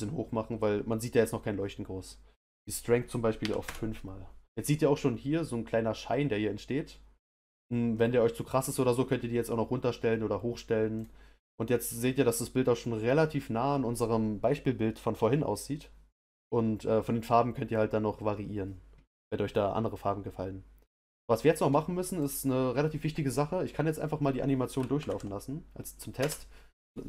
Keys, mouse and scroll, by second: 11.0 click, 25.0 shift+Left, 26.1 space.